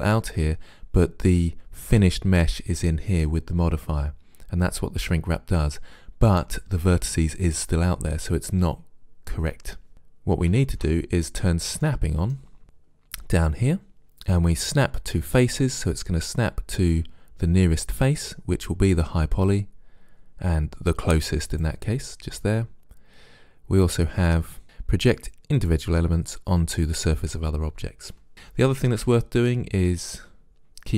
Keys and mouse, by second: 10.7 ctrl+z, 21.5-23.3 drag, 25.6-27.5 drag.